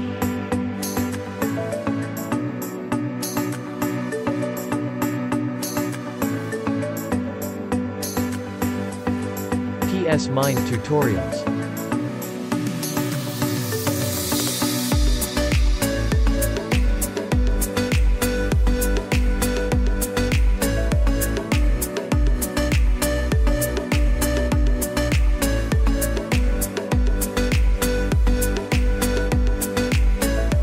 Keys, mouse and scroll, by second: 2.2 z, 2.6 click, 2.8 space, 3.1 click, 3.6 space, 4.9 j, 5.9 click, 8.0 ], 8.2 click, 12.5 space, 14.5-15.8 typing, 15.3 click, 16.7 click, 18.2 [, 18.5 click, 19.2 [, 19.7 click, 21.3 ], 21.6 click, 24.1 ], 24.1 click, 26.4 space, 26.8 click, 27.2 space, 27.3 space, 29.6-30.6 typing, 30.0 click, 30.5 click.